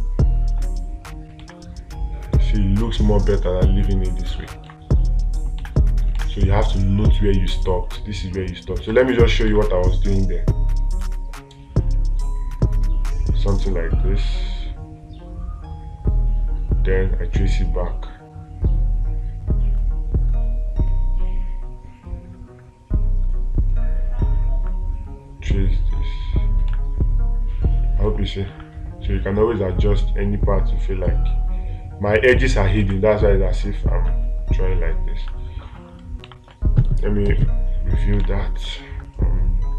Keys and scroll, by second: 1.8 space, 5.1 space, 6.6 space, 9.4 space, 9.9 space, 27.1 space, 33.3 space, 35.7 space.